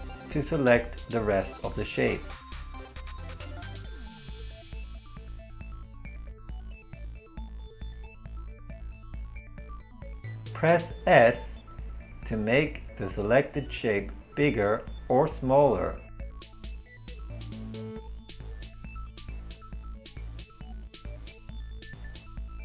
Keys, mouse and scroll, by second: 2.2 right click, 3.3 ctrl+l, 10.6 s.